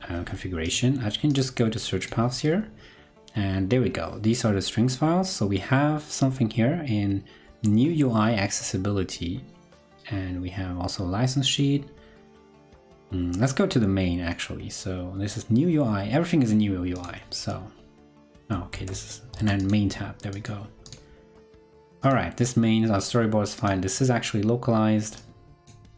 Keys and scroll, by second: 18.7 super+Tab, 19.3 super+Tab.